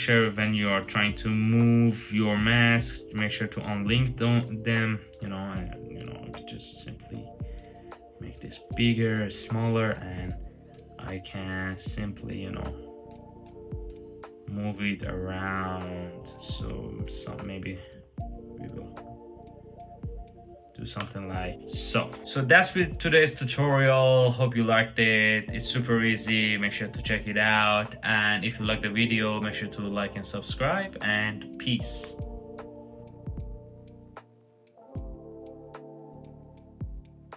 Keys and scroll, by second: 4.0 super+t, 20.7 Return.